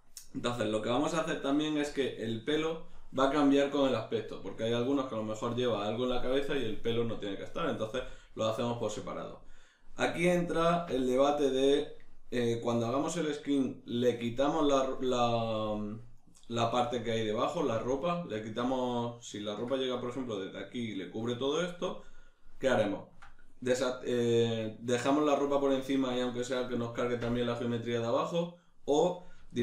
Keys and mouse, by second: 19.5 ctrl+middle click, 23.9 shift+middle click, 29.5 shift+middle click.